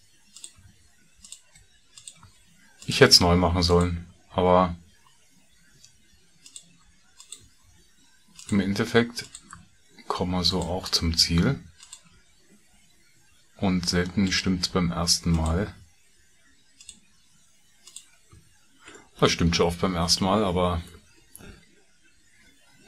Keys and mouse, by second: 0.7 f, 1.2 click, 2.3 f, 2.8 click, 3.6 click, 4.2 f, 6.4 click, 7.1 click, 7.6 f, 8.3 click, 9.6 f, 11.6 click, 12.2 f, 14.2 click, 15.2 shift+click, 15.7 f, 17.9 shift+click, 18.4 f, 19.0 middle click, 20.5 middle click.